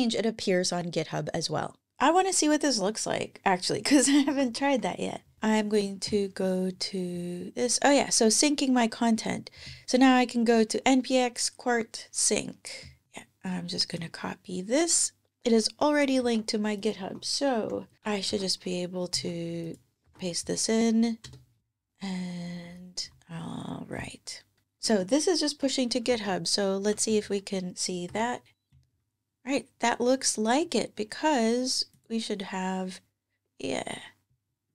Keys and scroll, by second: 4.1 super+Tab, 4.3 super+Tab, 16.0 super+c, 16.8 super+Tab, 18.1 super+v, 19.9 super+v, 21.1 Return, 24.7 super+Tab, 25.9 ctrl+Tab, 27.9 super+r.